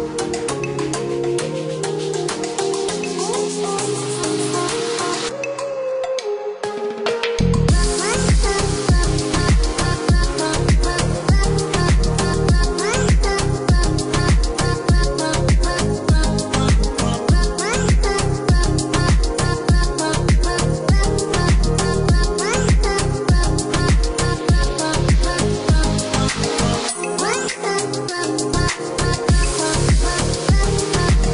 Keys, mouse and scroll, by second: 1.0 click, 3.2 click, 6.6 KP_4, 6.9 KP_0, 7.2 KP_Enter, 7.7 KP_Enter, 8.7 click, 11.7 Escape, 12.8-13.3 scroll down 1, 15.9 click, 17.4 click, 18.9 Escape, 20.0 click, 21.3 click, 22.2 click, 23.7 click, 25.1 click, 26.2 KP_1, 26.5 KP_Enter, 27.1 KP_Enter, 27.6 Escape, 28.8 ctrl+click, 30.1 ctrl+click.